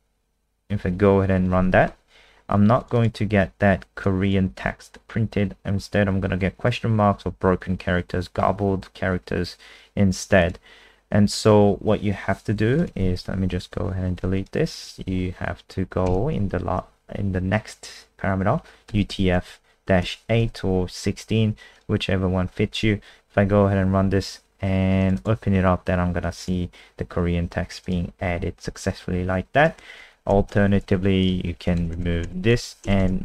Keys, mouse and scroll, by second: 2.8 click, 2.9 click, 4.0 click, 13.3 End, 13.4 Home, 13.7 Delete, 14.4 click, 15.1 ', 16.5 u, 18.6-20.0 typing, 20.4 ctrl+s, 21.7 click, 22.7 F5, 25.0 click, 25.1 click, 26.2 click, 28.4 alt+F4, 29.6 click, 30.1 Up, 30.4 shift+Home, 30.8 ctrl+c, 31.3 click, 31.8 ctrl+BackSpace, 31.9 ctrl+BackSpace, 32.2 ctrl+BackSpace, 32.8 BackSpace, 33.0 BackSpace.